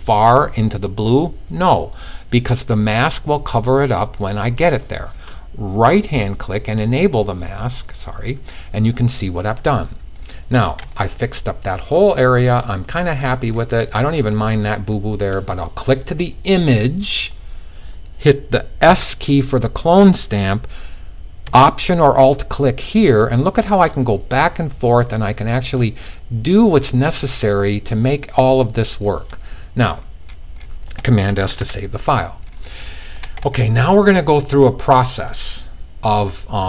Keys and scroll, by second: 18.4 s, 20.9 s, 31.0 super+s.